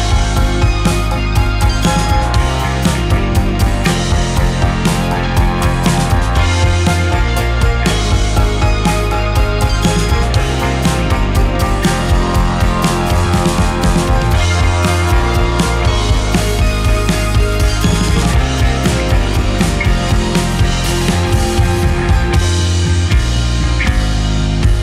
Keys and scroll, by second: 4.4 g, 7.5 z, 17.0-17.6 typing, 20.8 Delete.